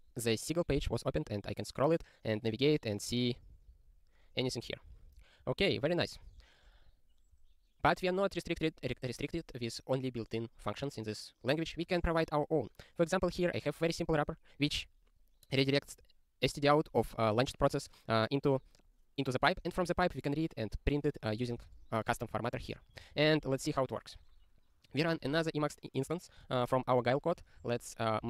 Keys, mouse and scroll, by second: 6.0 ctrl+e, 7.5 scroll down 3, 12.8-13.4 scroll down 2, 13.4 click, 21.3 click, 21.5 ctrl+a, 21.6 ctrl+space, 21.7 ctrl+e, 22.4 ctrl+g, 22.9 click, 23.3 ctrl+e.